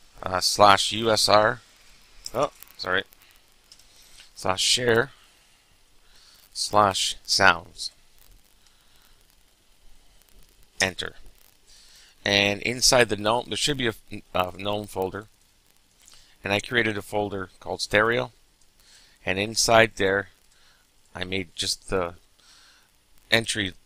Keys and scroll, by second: 0.9-2.6 typing, 3.7-9.8 typing, 10.8 Return.